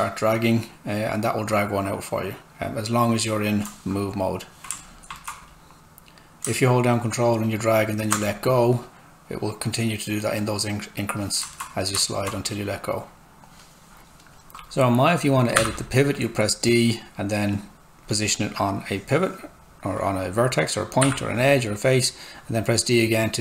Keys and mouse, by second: 4.8 alt+right click, 6.9 ctrl+click, 11.5 alt+right click, 14.0 d, 17.5 click, 21.0 d.